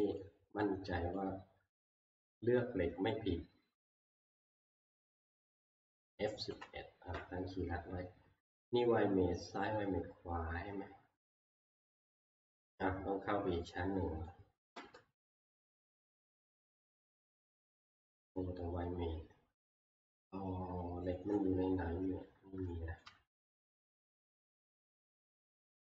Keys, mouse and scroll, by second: 0.0 click, 0.2 click, 0.6 middle click, 0.8 middle click, 2.1 scroll, 2.2 click, 4.4 shift+middle click, 4.6 click, 4.6 shift+click, 5.6 middle click, 6.5 F11, 9.3 middle click, 9.4 middle click, 10.1 middle click, 10.2 middle click, 10.6 scroll, 14.3 scroll, 14.7 Return, 15.2 middle click, 17.2 e, 18.0 click, 23.0 shift+middle click, 23.6 shift+middle click, 24.5 shift+middle click, 24.5 shift+middle click, 24.9 shift+scroll.